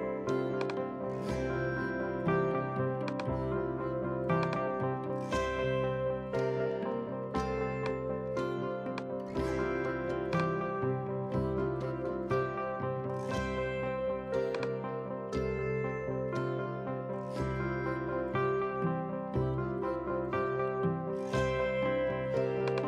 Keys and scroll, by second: 15.7-16.7 typing.